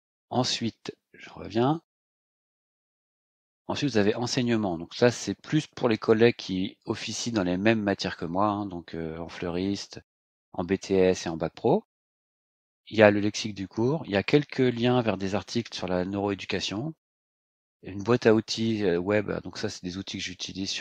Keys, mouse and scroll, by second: 0.3 click, 1.7 click, 3.8 click.